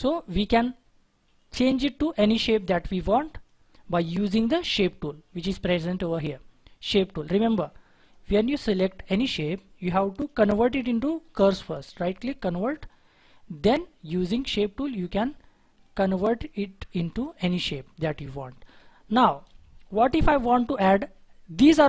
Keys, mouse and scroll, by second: 11.2 right click, 19.3-19.9 scroll down 1, 19.9-21.5 scroll up 1.